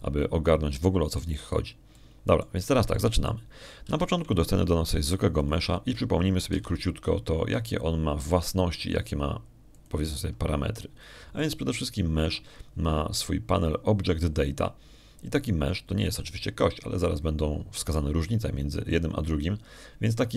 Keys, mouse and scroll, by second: 1.3 middle click, 2.3 middle click, 3.8 shift+click, 4.8 shift+click, 5.7 shift+a, 7.3 click, 8.4 n, 10.1 g, 11.6 ctrl+click, 12.1 ctrl+middle click, 13.3 shift+middle click.